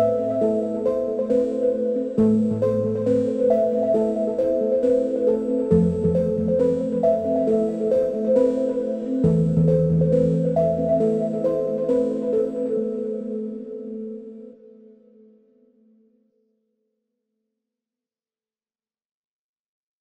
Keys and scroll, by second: 8.1 6, 10.7 Return, 16.8-17.1 typing, 17.5 Return.